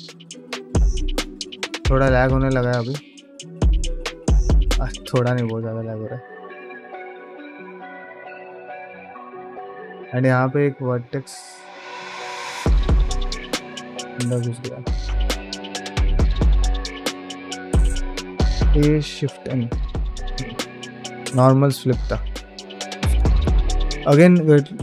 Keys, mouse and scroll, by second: 12.6 middle click, 13.0 shift+middle click, 13.3 ctrl+middle click, 13.8 click, 14.1 middle click, 14.6 g, 15.4 ctrl+middle click, 15.8 shift+Tab, 16.1 g, 16.8 click, 16.9 g, 20.1-24.8 middle drag.